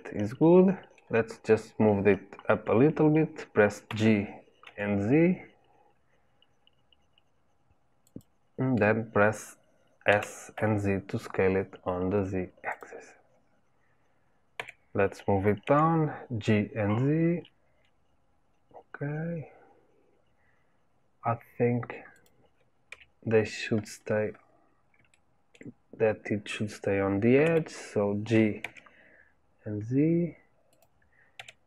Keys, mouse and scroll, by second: 3.8 g, 14.5 g, 22.8 KP_3, 23.9-24.6 scroll up 2, 24.6-25.1 scroll up 1, 25.1 shift+middle click, 25.7-27.4 scroll up 2, 27.4 g.